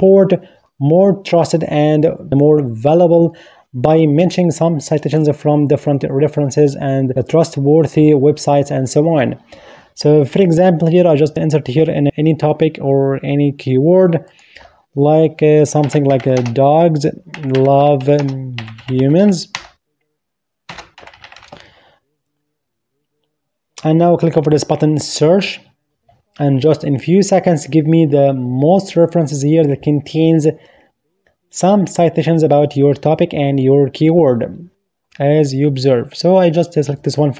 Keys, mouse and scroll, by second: 16.7 click, 18.1-18.8 typing, 19.8-22.0 typing, 23.1-23.8 typing, 26.4 typing, 27.6 click.